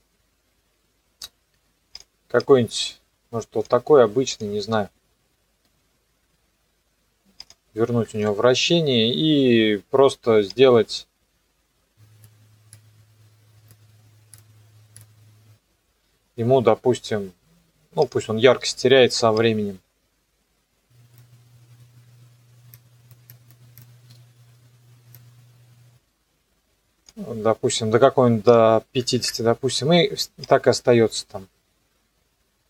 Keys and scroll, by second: 8.1 KP_0, 21.8 u, 24.0 KP_0, 24.2 KP_Enter, 29.0 KP_5, 29.2 KP_Enter.